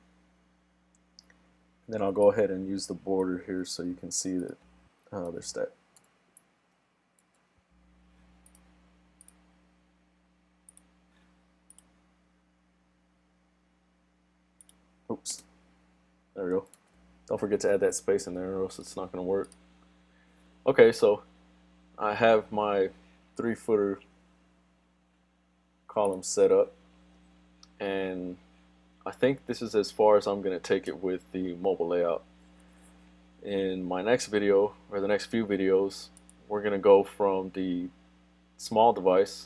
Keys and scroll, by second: 3.7 super+c, 5.5 super+v, 7.3 super+s, 16.8 super+s.